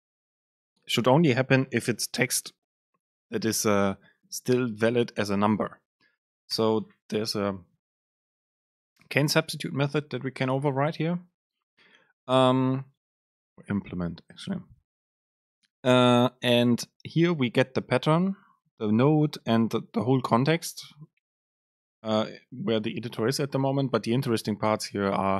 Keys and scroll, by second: 10.0 Down.